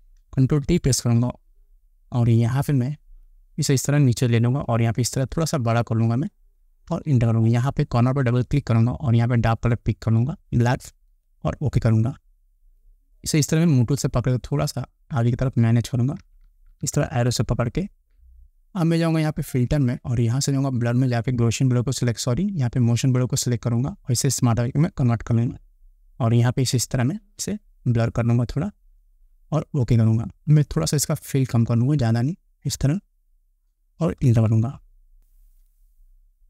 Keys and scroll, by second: 0.9 ctrl+t, 7.2 Return, 16.4 Up, 34.5 Return.